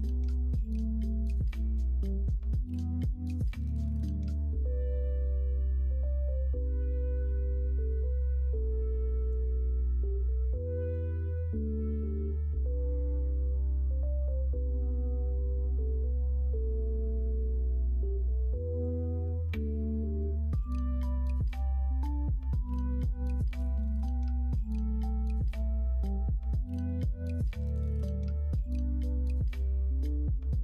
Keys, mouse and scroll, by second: 19.4 l, 20.5 g, 22.4 ctrl+z, 22.7 ctrl+z, 23.0 ctrl+z, 23.3 ctrl+z, 24.5 g.